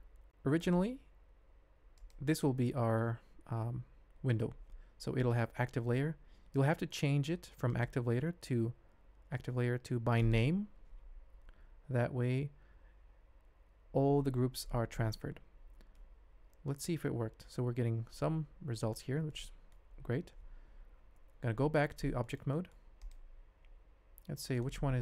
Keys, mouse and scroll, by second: 0.7-2.4 drag, 7.8-11.0 drag, 15.9-17.4 middle drag, 19.3 middle click, 21.3 ctrl+Tab, 22.2 shift+click, 22.5 click, 22.9 click, 23.7 g.